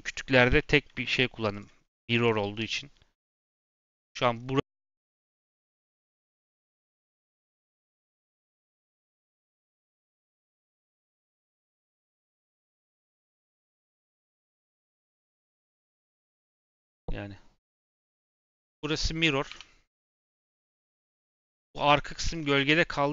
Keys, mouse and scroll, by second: 0.5 shift+middle click, 0.8-1.2 scroll up 4, 1.4 click, 1.7 scroll down 2, 2.0 shift+middle click, 2.5 /, 3.2 Tab, 3.7 a, 6.0 Tab, 18.4 Tab, 18.7 a, 19.4 3, 20.9 Tab.